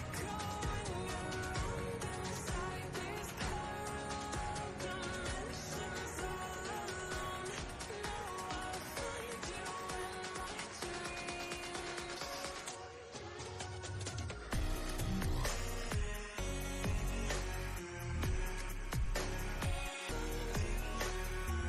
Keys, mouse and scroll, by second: 0.7 drag, 3.4 ctrl+click, 3.5-4.1 ctrl+space, 4.9 ctrl+click, 5.0-5.5 ctrl+space, 5.7-6.6 ctrl+click, 5.9 ctrl+space, 6.7-7.2 click, 6.9 space, 7.5-7.9 ctrl+space, 7.9-8.5 click, 8.1 space, 8.7 click, 11.0-12.2 drag, 14.2 shift+i, 16.0 click, 19.0 click, 19.5 super+d, 20.0-21.6 drag.